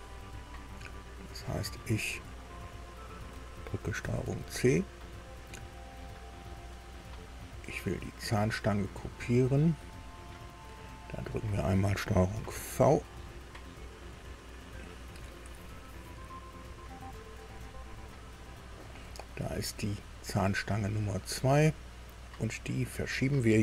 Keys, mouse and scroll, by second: 1.9 click, 2.6 click, 4.0 ctrl+c, 6.5 click, 7.0 click, 9.8 click, 11.3 click, 12.3 ctrl+v, 20.3 click, 22.6 right click.